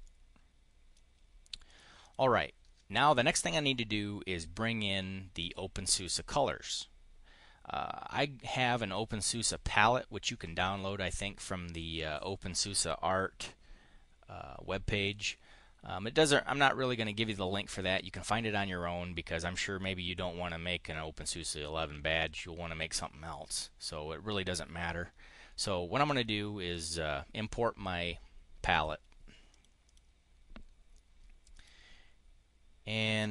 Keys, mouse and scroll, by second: 1.5 click, 1.8 click, 26.1 click, 28.5 click, 29.3 click, 29.7 click, 31.3 click.